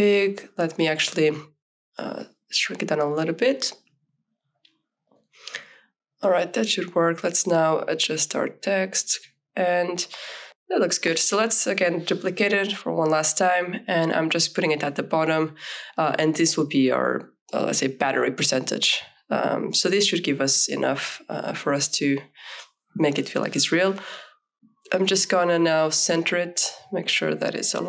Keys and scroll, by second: 1.1 ctrl+t, 8.7 shift+Left, 8.9 shift+Down, 9.0 shift+Left, 9.3 Up, 9.8 Left, 10.1 Up, 17.9 t, 20.8 KP_5, 22.0 shift+s, 24.6 ctrl+a, 25.4 v.